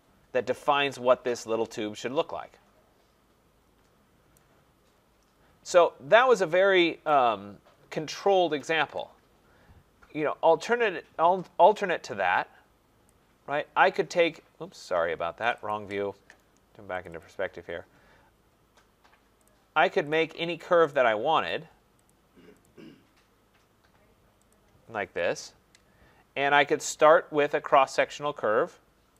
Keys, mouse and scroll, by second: 4.3 right click, 4.8 middle click, 4.9 middle click, 4.9 middle click, 5.2 middle click, 5.7 middle click, 5.8 middle click, 8.1 middle click, 13.1 click, 13.5 middle click, 13.7 middle click, 15.5 click, 15.7 click, 17.0 click, 17.2 click, 17.5 middle click, 17.6 middle click, 17.7 middle click, 19.5 click, 20.1 click, 20.9 click, 21.5 click, 22.1 click, 22.6 click, 24.5 click, 25.3 Return, 26.2-28.1 scroll, 28.1 click.